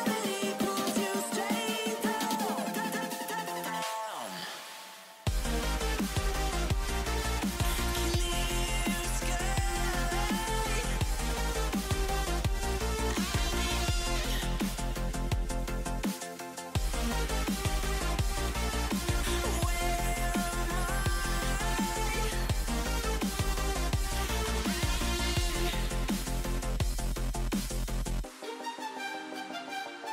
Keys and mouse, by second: 0.3 Delete, 1.0 a, 1.1 a, 1.2 w, 1.6 a, 2.7 Delete, 3.2 a, 3.9 a, 3.9 w, 4.3 a, 6.1-7.2 typing, 7.3 Tab, 9.0 click, 9.5 alt+h, 11.4 shift+h, 13.7 ctrl+j, 14.8 Tab, 15.3 a, 18.6-19.8 typing, 21.1 a, 22.3-22.7 drag, 23.0 drag, 23.2 middle click, 23.4-23.9 middle drag, 23.9 z, 24.2 drag, 24.5 a, 24.6 drag, 25.8 z, 26.5 z, 27.0 z, 27.8-28.3 middle drag.